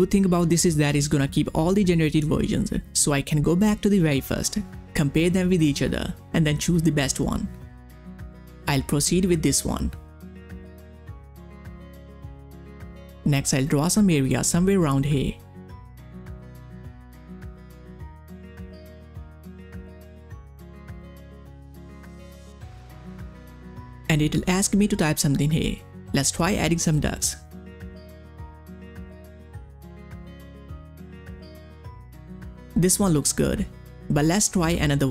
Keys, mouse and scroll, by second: 1.7 click, 1.7 click, 5.3 click, 11.8 click, 11.9 click, 16.8 click, 16.8-22.8 drag, 23.5 click, 24.3-25.5 typing, 26.7 click, 30.1 click, 33.5 click.